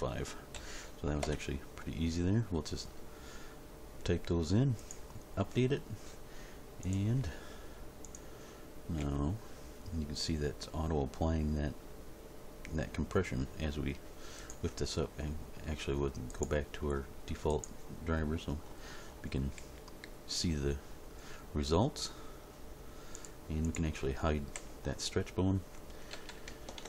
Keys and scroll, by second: 0.5 ., 1.1 5, 1.2 Return, 8.9 g, 19.5 g, 24.5 h, 26.1 a.